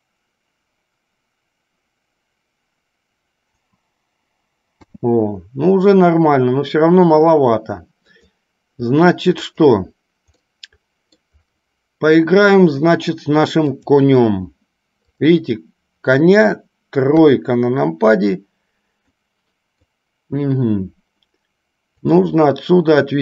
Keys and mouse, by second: 8.2 click, 9.5 click, 10.6-11.5 middle drag, 13.9 click, 15.1 click, 19.2-20.1 middle drag, 22.4-23.2 drag.